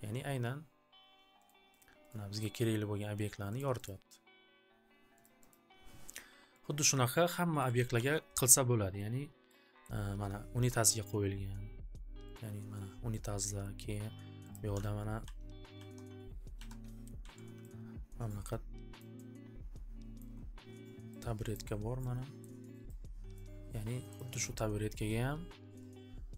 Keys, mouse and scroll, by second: 1.4 click, 1.8 click, 2.0 click, 2.4 click, 3.5 click, 3.9 click, 5.2 click, 5.6 click, 6.8 click, 7.6 click, 7.8 alt+ц, 7.9 alt+ц, 8.9 scroll, 9.8 middle click, 10.7 scroll, 11.0 click, 12.3 click, 13.8 scroll, 14.5 click, 15.2 alt+w, 15.3 scroll, 15.7 alt+ц, 16.5-19.1 typing, 19.0 alt+middle click, 20.2 alt+middle click, 20.9 alt+scroll, 22.4 alt+middle click, 22.5 alt+scroll, 23.5 alt+middle click, 24.1 click.